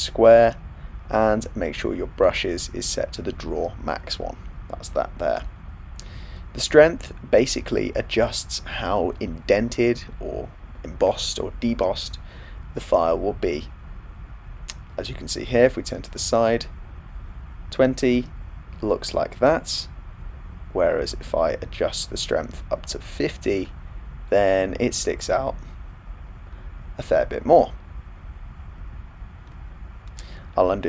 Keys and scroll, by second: 28.9 super+z, 29.4 super+z.